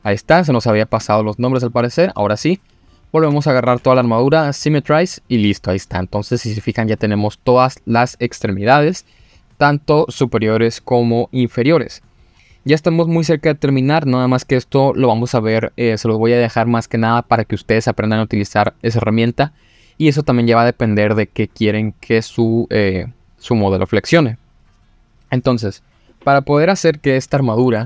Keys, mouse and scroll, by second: 0.4-0.7 scroll down 2, 1.0 shift+middle click, 1.7 scroll down 1, 2.8 click, 3.2 a, 3.9 F3, 27.7 middle click.